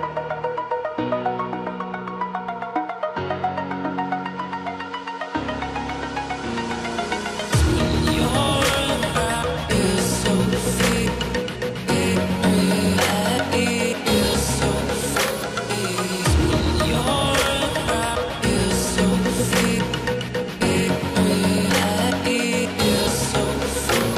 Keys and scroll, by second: 9.8 ctrl+z.